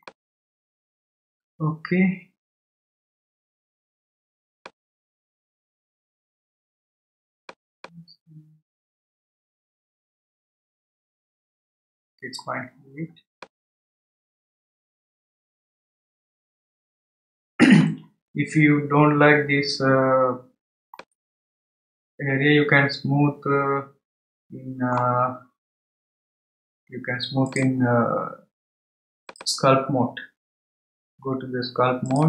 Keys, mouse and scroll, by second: 0.0-3.1 middle drag, 5.3-6.2 scroll up 1, 6.2-7.8 scroll up 1, 7.8-10.5 drag, 12.5-13.4 scroll down 2, 13.4-16.4 middle drag, 20.9-24.0 middle drag, 27.5-32.2 drag.